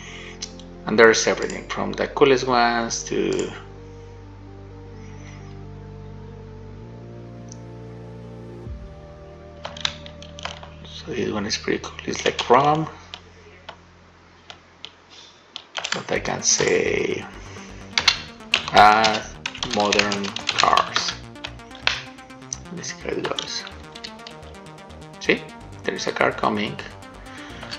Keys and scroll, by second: 9.9 shift+w, 10.6 a, 12.6 shift+a, 23.5 shift+w, 24.3 d.